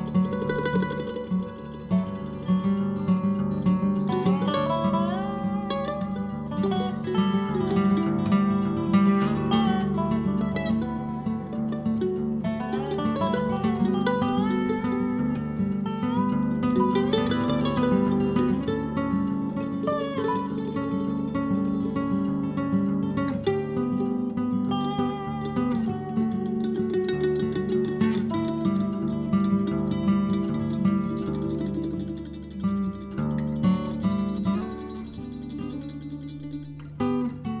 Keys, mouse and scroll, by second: 1.0 click, 1.3-2.2 scroll down 10, 2.6-3.9 scroll down 20, 4.3-5.1 scroll down 16, 5.1-6.6 drag, 6.6-9.3 scroll up 54, 9.3 middle click, 9.8 KP_1, 10.7-13.3 drag, 13.3 m, 13.8 n, 14.6 click, 15.5 n, 16.3-17.6 drag, 17.6-20.2 right drag, 20.2 middle click, 21.0-21.4 scroll down 1, 21.4 middle click, 22.2-25.2 drag, 25.2 scroll down 1, 25.4-26.0 scroll up 1, 26.0-26.3 scroll up 1, 26.3-27.4 drag, 27.4 KP_1, 28.1-30.4 drag, 30.4-31.1 scroll up 1, 31.1-37.6 drag.